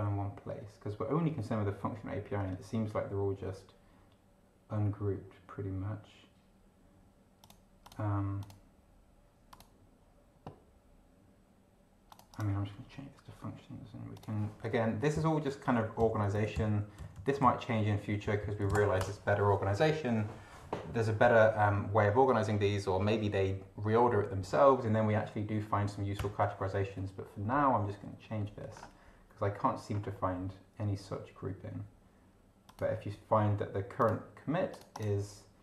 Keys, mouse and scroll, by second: 7.4 click, 7.9 click, 8.4 click, 9.5 click, 12.1 click, 14.1 click, 15.1 ctrl+Left, 15.6 ctrl+End, 16.0 ctrl+Left, 17.0 ctrl+Right, 17.4 ctrl+Left, 18.6 ctrl+shift+Left, 19.0 ctrl+shift+BackSpace, 26.2 Return, 28.9-29.9 scroll down 2, 29.9 scroll down 1, 32.6 click, 33.9 click, 34.7 click.